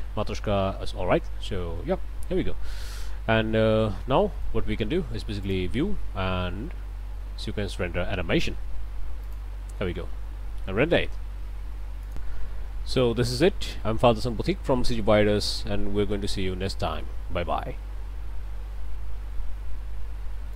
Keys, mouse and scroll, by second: 0.9 scroll down 2, 3.4-4.0 scroll down 4, 4.2 middle click, 5.4 click, 9.2 click, 12.1 click, 20.5 click.